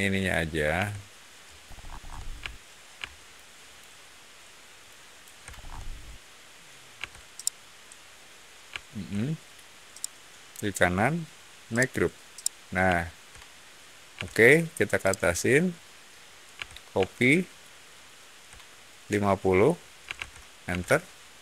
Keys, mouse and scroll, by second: 1.6-2.0 scroll up 2, 3.2-3.6 ctrl+shift+drag, 4.7-5.1 ctrl+shift+drag, 5.4 ctrl+shift+middle click, 6.9 x, 7.3-9.4 middle drag, 9.8 shift+right click, 11.6 click, 12.3-13.6 shift+middle drag, 14.1 m, 14.9 click, 17.0 shift+middle click, 17.7 shift+middle click, 19.7-20.6 typing, 20.6 Return.